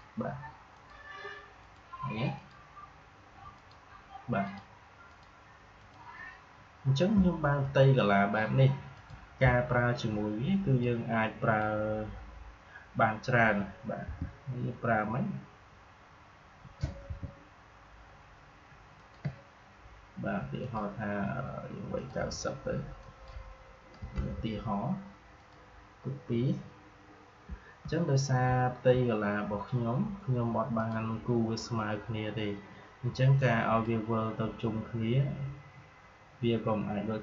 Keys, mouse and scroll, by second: 8.9-13.9 drag, 13.9 r, 17.0 r, 18.9 alt+click, 25.3 click, 28.4-28.8 alt+scroll down 1, 28.8-30.6 scroll up 1, 32.9 click, 33.3-36.2 drag.